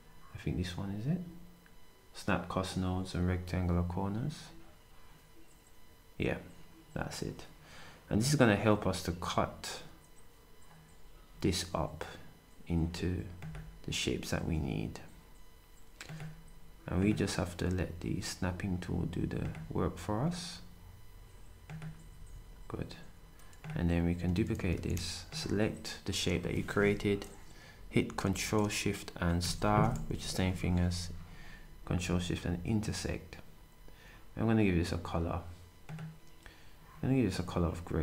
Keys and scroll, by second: 22.1 shift+s, 24.5 d, 30.2 d.